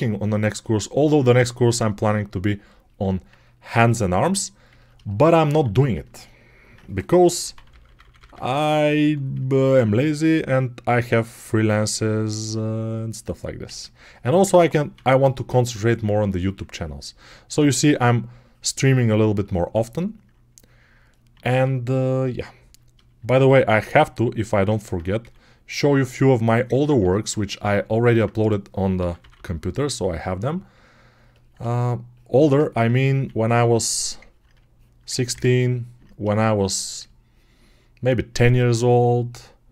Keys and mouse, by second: 2.9-6.0 drag, 5.4 alt+q, 7.2-8.9 typing, 9.4-12.2 alt+drag, 12.2-13.5 right drag, 13.5 ctrl+z, 14.8 3, 17.4 x, 17.8-30.4 drag, 21.3 1, 23.3 1, 25.1 3, 26.8 1, 28.8 p, 29.0 [, 29.2 [, 30.4 right click, 32.9-36.5 drag, 33.0 1, 35.3 ctrl+z, 38.3-39.7 alt+drag.